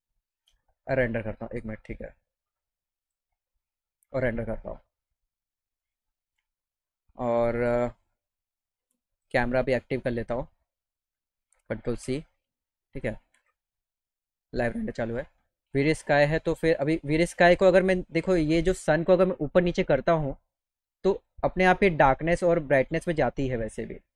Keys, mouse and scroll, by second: 0.0 ctrl+scroll up 2, 0.2 ctrl+middle click, 0.9 ctrl+alt+middle click, 13.4 click, 18.8-19.9 drag, 21.3 click.